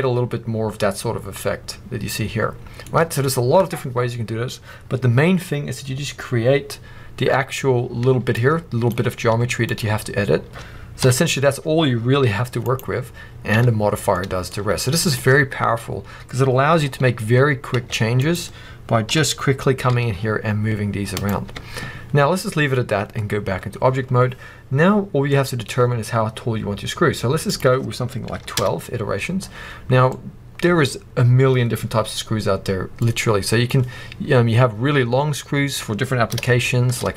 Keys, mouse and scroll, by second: 0.0-1.6 middle drag, 7.8-8.3 scroll up 1, 8.3 click, 9.0 scroll up 1, 9.2 z, 10.9 KP_1, 12.2 g, 12.7 right click, 13.4 Tab, 13.7-14.0 scroll down 1, 14.0-17.6 middle drag, 14.5 z, 16.5-17.1 scroll up 1, 17.6 Tab, 18.1 click, 19.0 g, 21.2 right click, 21.4 Tab, 22.0 scroll down 1, 25.2-27.4 middle drag, 27.4-30.0 drag, 28.5 2, 28.6 Return, 29.3-29.9 scroll down 1, 30.0-32.9 middle drag, 32.9-36.4 drag, 33.8-35.0 scroll down 2, 35.0-36.4 scroll up 2, 36.4-37.1 shift+middle drag.